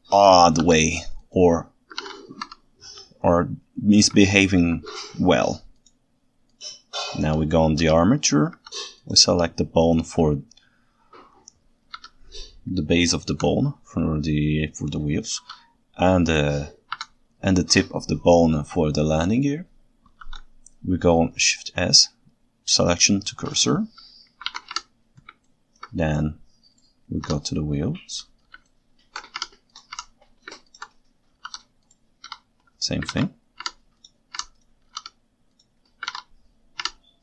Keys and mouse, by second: 0.6 shift+s, 2.0 alt+a, 2.5 Tab, 4.2-4.7 ctrl+alt+right drag, 8.6 c, 9.8 right click, 13.3 Escape, 15.4 shift+s, 20.2 shift+s, 24.6 alt+a, 24.9 Tab, 25.5-25.8 ctrl+alt+right drag, 28.7 ctrl+shift+middle click, 31.5 shift+s, 32.3 KP_1, 33.1 alt+a, 33.7 Tab, 34.5 Tab, 34.9 shift+s, 36.1 alt+a, 37.0 Tab.